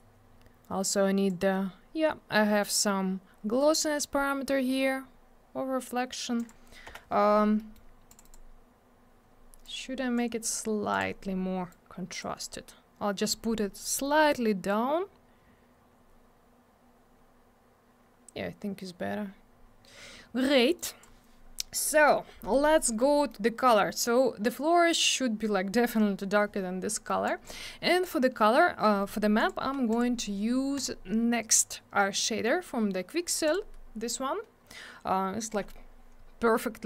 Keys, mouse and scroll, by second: 0.9 click, 3.7 scroll down 1, 6.3 click, 6.4 click, 6.8 m, 7.5 middle click, 7.7 middle click, 8.1 click, 8.1 click, 8.2 click, 8.3 double click, 9.6 click, 10.9 click, 10.9 click, 11.7 click, 14.1 scroll up 1, 15.9-17.9 scroll down 1, 20.7 click, 22.4 middle click, 22.7 scroll down 1, 23.0 middle click, 26.9 middle click, 27.1 middle click, 27.2 click, 27.4 double click, 29.3 click, 29.4 click, 29.9 click, 29.9 click, 30.7 click, 30.8 click, 33.4 click, 33.5 click.